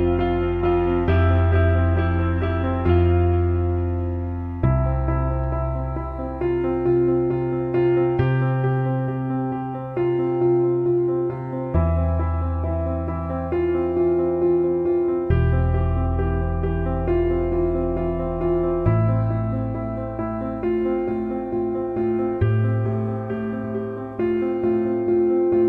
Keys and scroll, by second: 21.7 ctrl+KP_0.